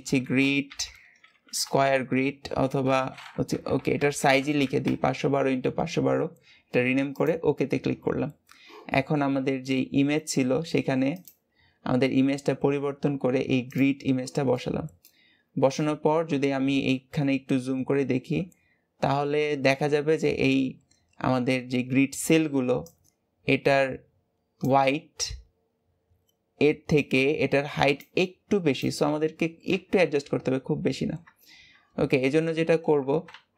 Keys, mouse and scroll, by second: 7.9-11.1 scroll up 2, 11.1-14.1 drag, 14.4-15.1 middle drag, 15.1-16.2 scroll up 2, 16.2 KP_1, 17.2-18.6 scroll up 8, 18.8-22.2 scroll up 3, 30.2-31.1 scroll down 10, 31.1 Tab, 32.2 alt+a.